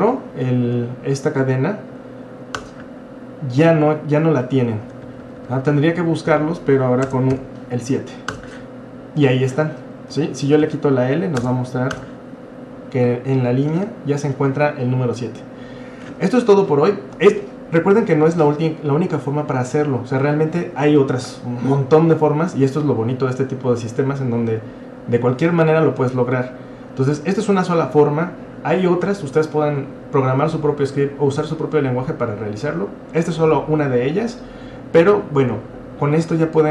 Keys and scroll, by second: 0.3 Up, 0.7 Up, 2.5 Return, 4.9 Up, 5.1 Left, 5.2 Left, 5.4 Left, 5.5 Left, 5.7 Left, 6.3 Left, 7.1-8.3 BackSpace, 7.3 7, 8.3 Return, 10.1 Up, 10.7-12.1 Left, 11.4-12.1 BackSpace, 12.0 Return.